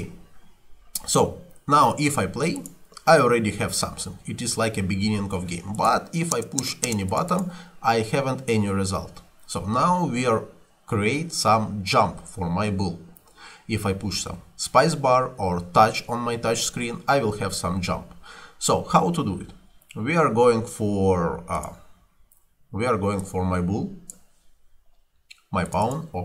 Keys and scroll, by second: 6.4 space, 8.8 Escape.